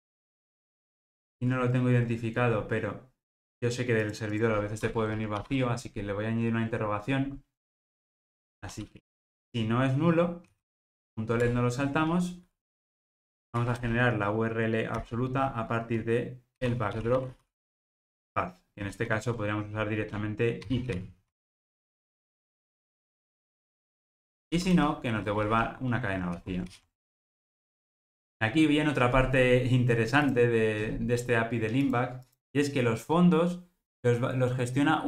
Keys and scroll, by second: 11.5 Return, 21.2 Escape, 26.3 alt+super+l.